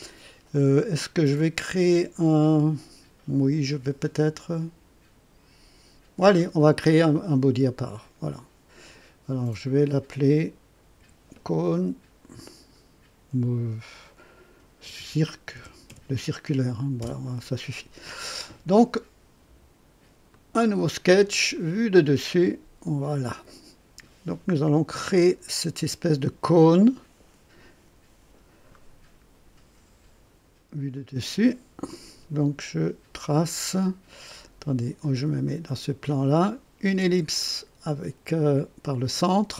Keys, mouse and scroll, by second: 7.8 click, 9.6 click, 10.9 F2, 14.6-15.8 typing, 17.0 Return, 20.3 click, 21.5 click, 23.1 click, 30.9 click, 35.4 click.